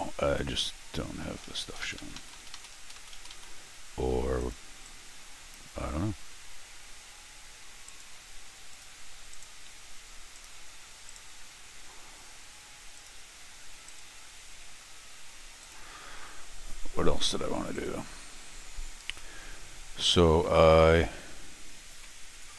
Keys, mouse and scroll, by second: 1.0 shift+Tab, 1.2 shift+Tab, 1.5 shift+Tab, 1.6 shift+Tab, 1.8 shift+Tab, 2.0 shift+Tab, 2.3 shift+Tab, 2.5 shift+Tab, 3.1 Tab, 3.3 Tab, 4.4 click, 4.8 click, 7.9 right click, 8.7 click, 9.3-11.1 right drag, 10.3 click, 12.9 click, 13.9-22.5 right drag, 15.6 click, 17.7 click, 19.2 middle click, 20.4 middle click, 22.0 middle click.